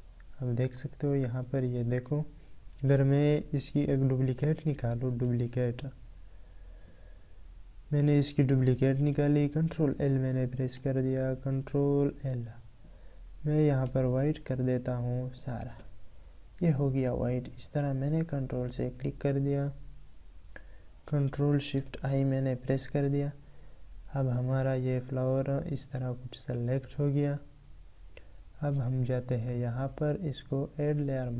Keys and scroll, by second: 8.5 ctrl+l.